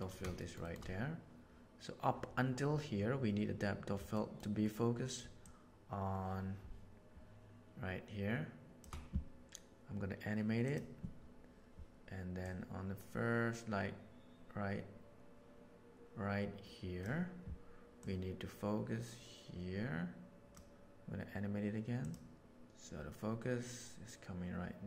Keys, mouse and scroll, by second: 0.3 shift+middle click, 0.6 shift+middle click, 4.2 middle click, 5.4 shift+click, 8.6 shift+click, 10.6 right click, 12.4-17.0 drag, 18.0-20.6 drag, 22.0 click, 22.4-24.8 drag.